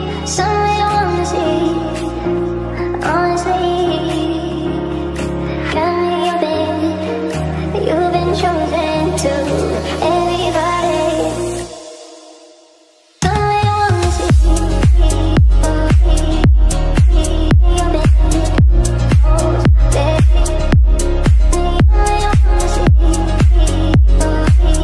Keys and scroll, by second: 0.7 ctrl+z.